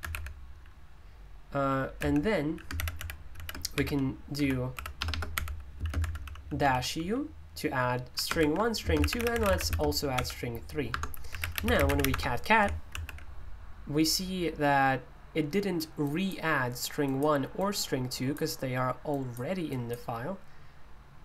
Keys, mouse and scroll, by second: 0.0 Escape, 0.1 k, 1.9-7.0 typing, 8.1-12.5 typing, 10.9 Return, 16.7-21.2 drag.